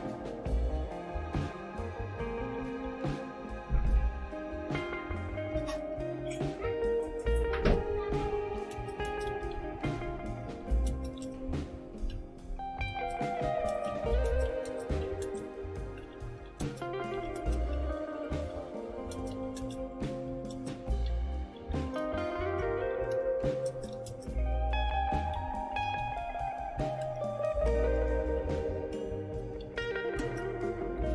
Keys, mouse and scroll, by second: 3.2-3.7 typing, 3.5 Return, 8.1-28.3 typing, 29.4-31.1 typing.